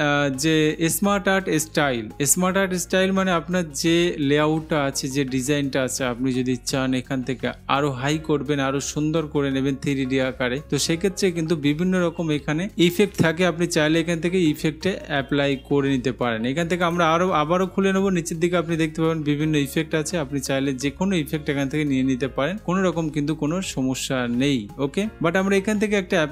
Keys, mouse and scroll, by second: 17.1-18.1 drag.